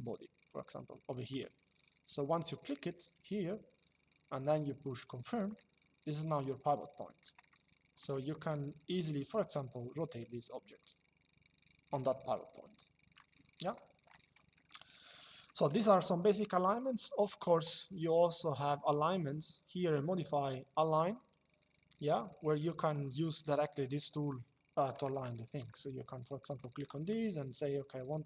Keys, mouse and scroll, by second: 1.0 click, 5.2 click, 7.2 shift+middle click, 9.2 click, 13.5 Escape, 17.0 click, 22.5 click, 24.9 shift+middle click, 26.2 click, 28.0 click.